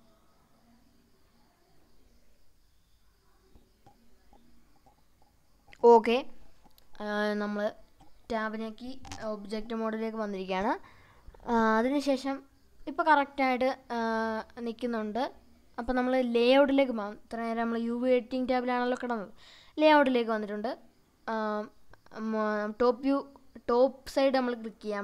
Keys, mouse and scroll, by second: 2.6 click, 3.1 scroll down 2, 3.4 middle click, 5.7-6.1 middle drag, 6.6-7.6 drag, 8.6-13.2 middle drag, 13.4 Tab, 14.0 Tab, 16.2 click, 17.3-20.0 middle drag, 20.5-22.2 right drag, 22.7-24.1 drag, 24.6 Tab.